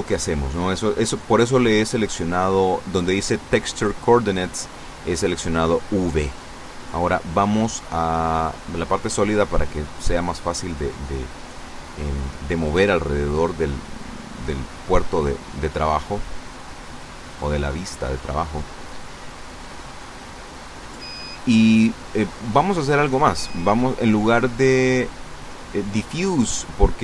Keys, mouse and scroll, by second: 1.1-5.6 middle drag, 6.4 click, 8.1 click, 8.9-13.7 middle drag, 15.2-17.6 middle drag, 23.0 click.